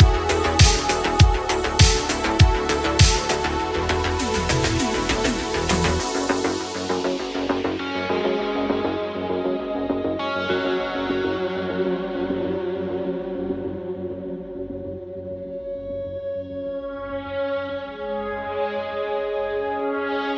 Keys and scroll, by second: 15.5 ctrl+z, 16.4 ctrl+z, 19.2 ctrl+z.